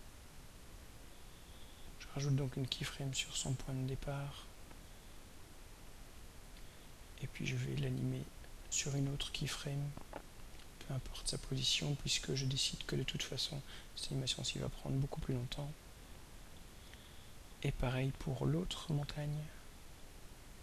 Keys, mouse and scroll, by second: 2.8 click, 5.3 click, 7.4 click, 9.9-11.7 drag, 13.7-15.6 drag, 18.9 click.